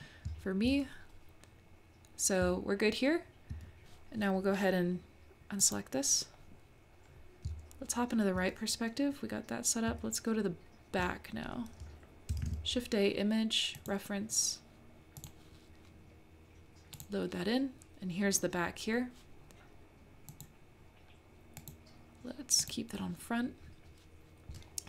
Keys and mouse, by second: 0.3 `, 2.4 `, 5.6 click, 7.4 `, 9.9 `, 12.4 shift+a, 20.3 click, 21.6 click, 22.6 click.